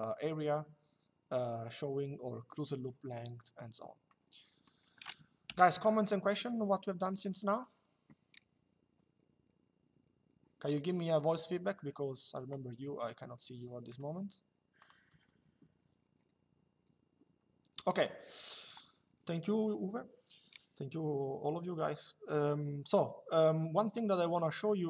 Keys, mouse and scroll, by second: 3.2 Escape, 3.8 click, 5.1 Delete, 5.8 middle click, 10.3 click, 13.6 click, 14.9 Escape, 17.5 middle click.